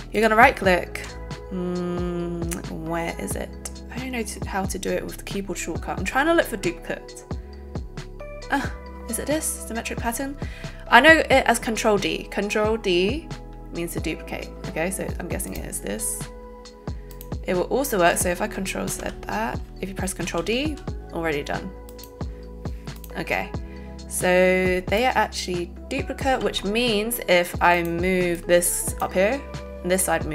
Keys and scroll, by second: 18.9 ctrl+z, 20.2 ctrl+d.